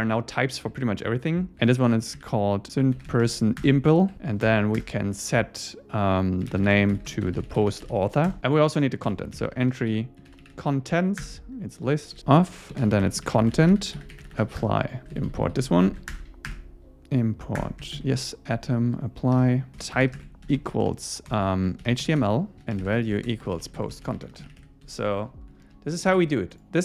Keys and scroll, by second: 3.6 Return, 4.5 Return, 5.0 Return, 8.3 Return, 8.4 Down, 9.1 Return, 11.2 Return, 14.6 Return, 15.0 Left, 16.1 alt+Return, 17.6 Return, 18.0 super+Right, 24.9 Escape, 25.2 super+space, 25.7 super+s.